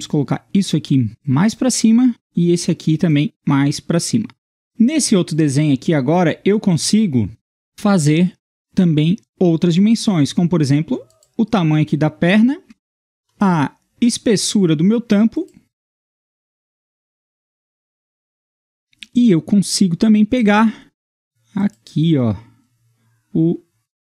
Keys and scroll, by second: 17.1 Escape.